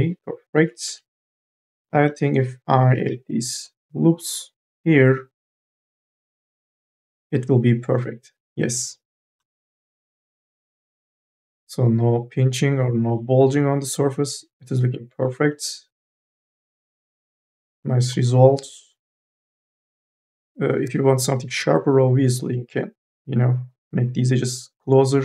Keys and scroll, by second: 1.0 q, 2.6 k, 3.1 l, 5.2 q, 20.0-21.7 typing.